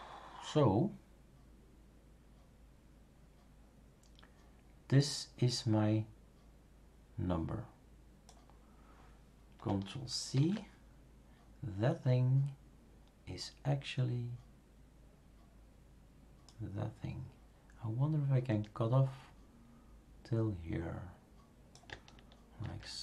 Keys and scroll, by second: 10.3 ctrl+c, 22.6 ctrl+v.